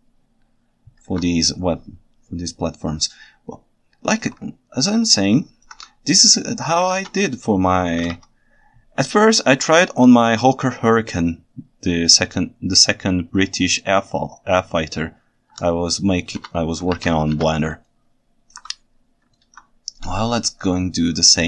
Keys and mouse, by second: 1.1 alt+a, 3.1 ctrl+alt+right drag, 3.4 ctrl+alt+middle drag, 3.5 ctrl+alt+right click, 3.7-4.1 ctrl+alt+middle drag, 4.1 ctrl+alt+right click, 5.3 ctrl+shift+middle click, 6.9 ctrl+Tab, 7.8 r, 8.1 y, 11.6-16.3 middle drag, 16.4 alt+a, 17.0 ctrl+Tab, 17.4 alt+a, 18.0-18.5 ctrl+alt+right drag, 19.4 ctrl+alt+right drag.